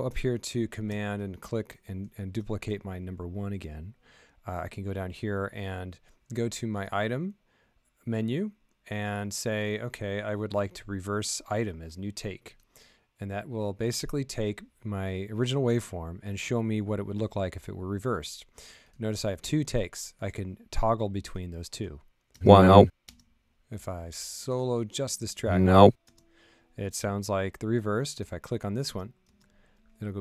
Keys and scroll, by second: 22.3 space, 23.0 space, 25.3 space.